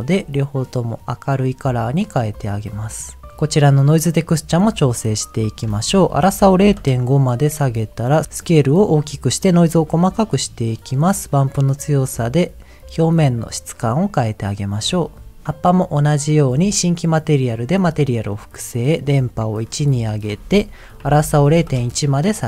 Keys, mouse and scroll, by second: 2.9 click, 3.3 shift+middle click, 4.2-4.6 scroll up 2, 4.6 middle click, 5.5-6.7 drag, 8.2 ctrl+z, 8.9 click, 10.5-14.0 drag, 14.5 click, 17.2 click, 18.0 middle click, 19.0 click, 20.1-21.6 drag.